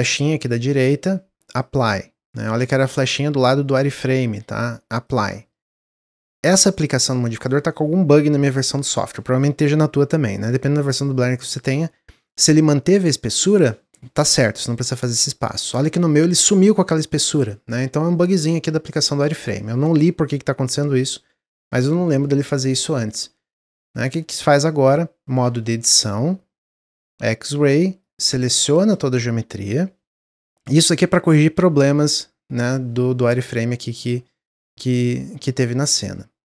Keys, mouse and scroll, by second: 3.3 ctrl+z, 4.4-7.5 drag, 8.6-11.7 middle drag, 11.7-12.1 scroll up 3, 12.1-15.2 shift+middle drag, 25.3 Tab, 27.2 click, 31.4 m.